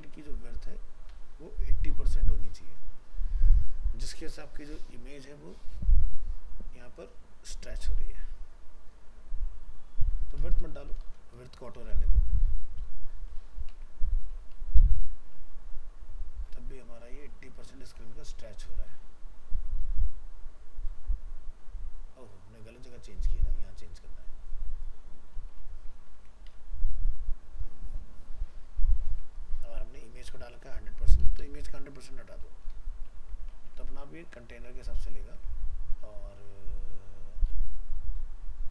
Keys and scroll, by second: 13.3 ctrl+s, 13.7 alt+Tab, 17.8 alt+Tab, 25.7 ctrl+s, 26.2 alt+Tab, 33.2 ctrl+s, 33.6 alt+Tab.